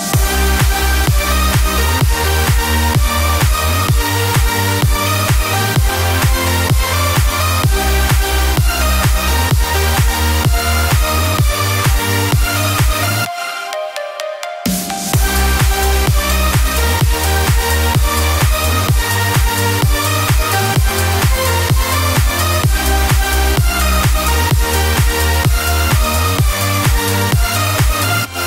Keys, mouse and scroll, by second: 0.0 click, 1.1 [, 1.4 [, 1.9 click, 2.4 [, 2.6 [, 2.7 [, 3.1 [, 6.2 click, 7.4-8.2 scroll, 9.5 click, 9.8 scroll, 10.3 scroll, 11.1 scroll, 11.1 h, 12.2 click, 12.8 click, 14.2 v, 15.2 click, 16.8 middle click, 17.0-17.8 scroll, 18.9-19.8 typing, 23.0 click, 26.2 click, 26.5 click, 27.0 click, 28.3 click.